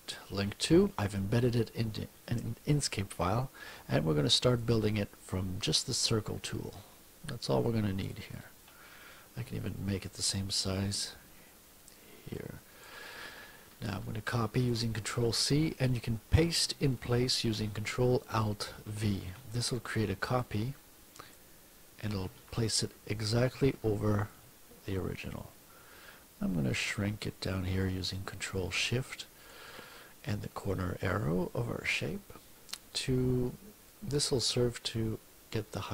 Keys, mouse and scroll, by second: 4.5 click, 6.0-8.3 ctrl+drag, 9.4 F1, 10.2-13.0 drag, 14.6 ctrl+c, 18.9 ctrl+alt+v, 20.4 click, 22.2 ctrl+z, 24.3-29.7 ctrl+shift+drag, 33.9 click.